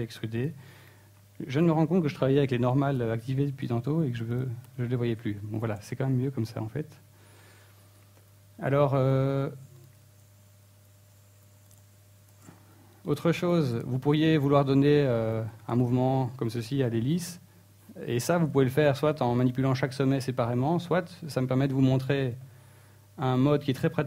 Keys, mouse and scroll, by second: 1.9 n, 3.4 click, 3.7 n, 4.4 shift+middle click, 4.8 Tab, 5.2 middle click, 6.2-6.7 scroll up 3, 6.3 Tab, 6.8 middle click, 7.7 alt+right click, 8.6 alt+shift+right click, 9.5 middle click, 9.9 shift+middle click, 10.4 g, 11.8 right click, 12.2 g, 14.1 click, 14.5 ctrl+z, 17.8-18.2 scroll up 2, 18.2 shift+middle click, 21.2 middle click.